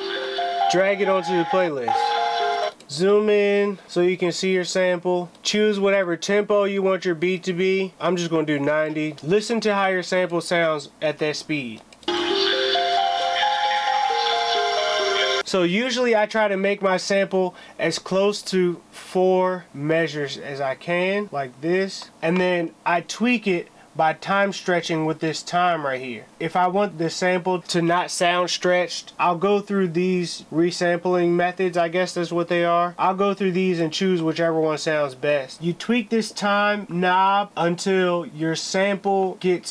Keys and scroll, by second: 1.3 space, 2.2 r, 2.6 Return, 9.1 space, 9.8 space, 11.6 space, 13.3 space.